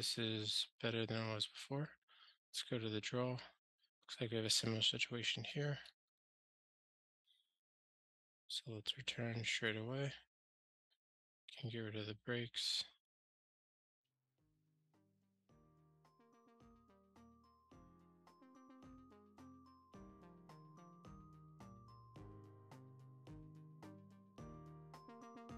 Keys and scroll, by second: 6.1 ctrl+g, 11.7 super+BackSpace, 12.3 super+BackSpace, 14.9 ctrl+g, 17.5 alt+super+l, 21.1 super+BackSpace, 21.8 ctrl+alt+shift+r.